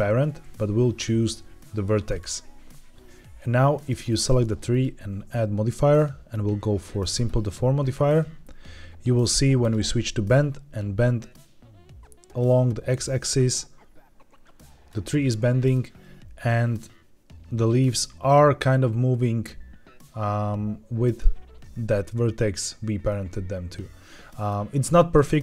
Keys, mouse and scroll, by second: 3.7 click, 4.6-7.2 drag, 9.5 click, 11.1-14.8 drag, 15.0 middle click, 16.6-21.1 drag, 23.0-24.4 middle drag, 24.7-25.0 middle drag.